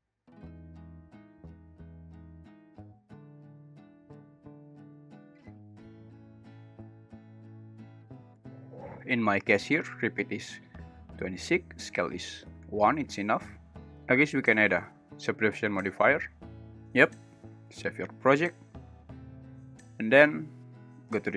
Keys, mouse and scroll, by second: 1.1 click, 1.9-4.4 drag, 4.9 click, 5.6-6.1 drag, 6.5-8.1 drag, 12.0 click, 13.7 space, 14.3 click.